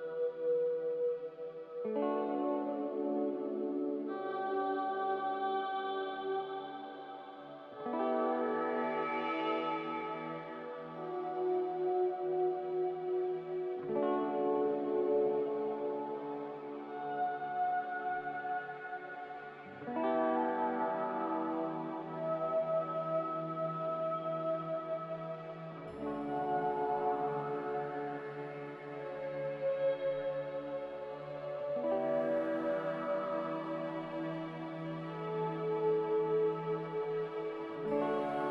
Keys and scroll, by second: 0.2 a, 9.4 1, 9.5 Return, 17.1-17.8 typing, 20.6-21.4 typing, 27.1 Delete, 29.3 Delete, 30.4 b.